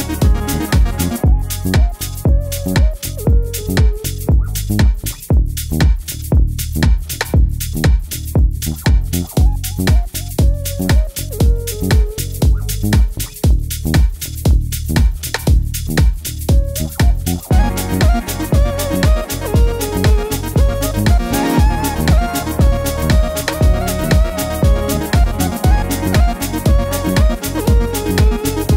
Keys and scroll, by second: 0.9 super+d, 9.8 super+d, 16.3 super+Up, 16.5 super+Up, 20.7 Left, 20.8 Left, 21.0 Down, 21.1 Down, 21.2 Down, 21.3 Right, 21.4 Right, 21.7 super+Down, 21.8 super+Down, 21.9 super+Down.